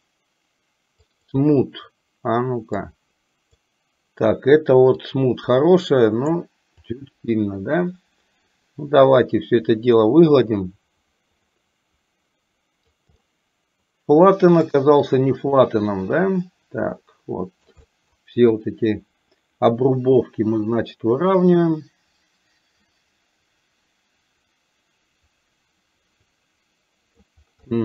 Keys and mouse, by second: 1.2 click, 2.9 click, 5.1-6.5 drag, 6.9-12.9 drag, 13.2-14.4 middle drag, 14.7 shift+middle click, 15.6-17.7 drag, 17.9 middle click, 18.5-27.2 drag, 27.6 middle click.